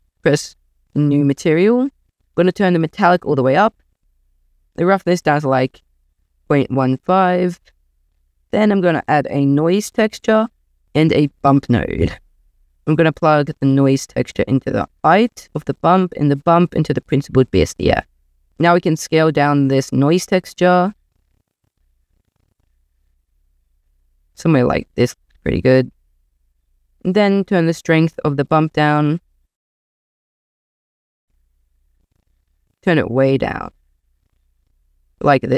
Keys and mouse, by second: 0.9 click, 2.0 click, 2.1 shift+a, 2.8 click, 4.3-7.2 drag, 8.2 shift+a, 10.7 click, 10.9 shift+a, 13.7 click, 16.1 click, 18.5 ctrl+z, 19.1-20.5 drag, 20.5 click, 20.8 click, 22.0-24.1 drag, 24.4-26.0 drag, 27.7-34.3 drag.